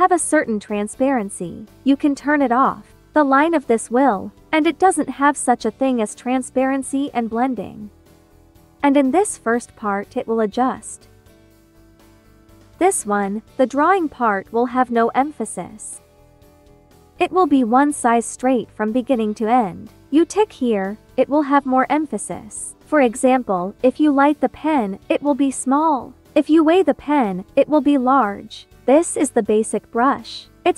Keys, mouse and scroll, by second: 1.9 click, 11.7 click, 14.5-19.0 drag, 19.8-23.8 drag, 23.8 ctrl+z, 24.0-26.2 ctrl+drag.